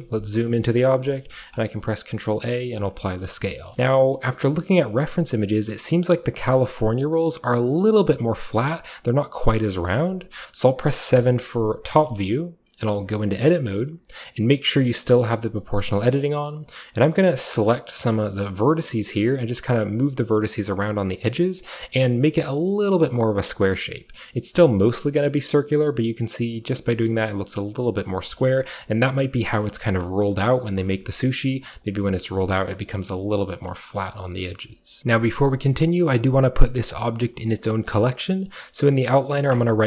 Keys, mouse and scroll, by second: 0.7 shift+middle click, 0.9-2.8 shift+middle drag, 1.1-1.8 typing, 2.8 ctrl+click, 3.7-6.5 shift+middle drag, 4.9-6.4 scroll down 1, 6.4-8.6 scroll down 1, 6.7-9.7 middle drag, 8.6-9.6 scroll down 1, 9.6 scroll down 1, 9.9-11.9 middle drag, 11.1 KP_7, 12.0-15.1 middle drag, 13.0 Tab, 15.1 click, 15.6 click, 15.9 shift+click, 16.1-17.6 shift+scroll up 1, 17.6 shift+scroll up 1, 18.6 g, 19.6 scroll down 1, 19.9 click, 20.8 g, 21.2 click, 21.9 g, 22.7 g, 23.4 scroll down 1, 23.6 click, 24.5 g, 25.5 click, 26.5 click, 26.5 g, 28.4-30.6 shift+middle drag, 28.4 Tab, 32.0 right click, 32.0 g, 32.2 click, 32.2 right click, 33.0-33.7 scroll down 1, 33.1 Tab, 33.5-37.7 shift+middle drag, 34.6 a, 35.0 ctrl+b, 36.1-37.7 scroll up 1.